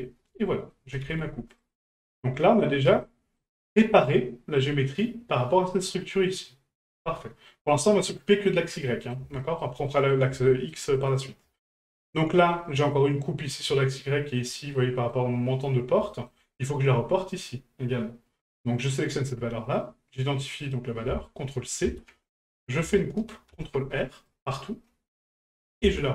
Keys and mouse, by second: 0.7 middle click, 1.9 middle drag, 3.0-3.4 middle drag, 6.4-6.8 middle drag, 8.9 middle drag, 9.4 shift+middle drag, 9.9 middle drag, 10.4 shift+middle drag, 10.9 middle drag, 11.5 shift+middle drag, 12.5 middle click, 14.8-15.1 middle drag, 16.1 shift+middle drag, 16.5 middle click, 18.8 right click, 20.6-22.5 drag, 25.7-26.1 ctrl+drag.